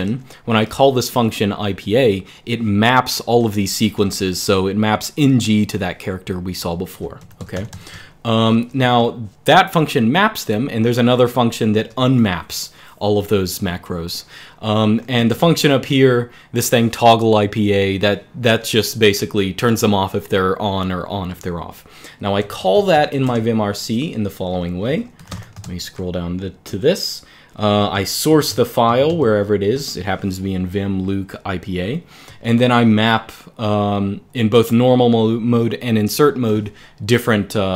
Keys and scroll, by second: 0.0-0.3 typing, 3.6 j, 3.8 j, 6.9 alt+k, 7.1 alt+k, 7.3 alt+k, 7.4 alt+k, 7.8-8.7 typing, 9.9-12.2 typing, 13.4 typing, 14.7-15.9 typing, 22.1 super+Return, 22.2-23.4 typing, 24.4-25.6 typing, 28.0-28.8 typing, 28.7 Escape, 28.9 Escape, 32.0 j.